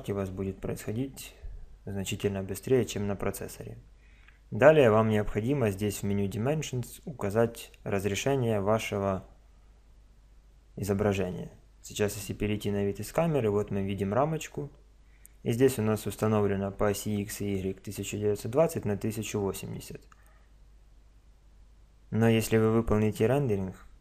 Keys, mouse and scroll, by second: 12.4 KP_0, 13.5-15.7 middle drag.